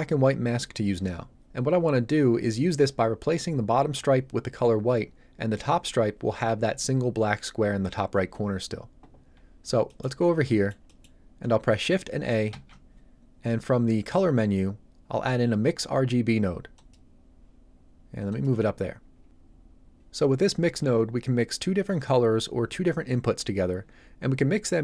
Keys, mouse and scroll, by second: 9.8 middle click, 10.2 scroll down 1, 10.4 middle click, 12.5 shift+a, 16.7 click.